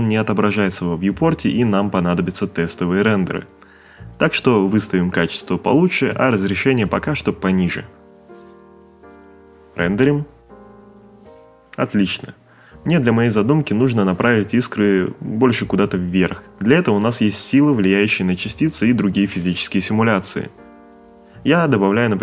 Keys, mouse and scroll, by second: 6.2 middle click, 6.7 shift+middle click, 7.0 middle click, 7.2 shift+middle click, 9.6 click, 11.6 click, 12.3 shift+a, 14.1 click, 16.7 ctrl+middle click, 17.3 middle click, 18.2 click, 19.2 5, 19.5 click, 21.1 click, 22.1 5.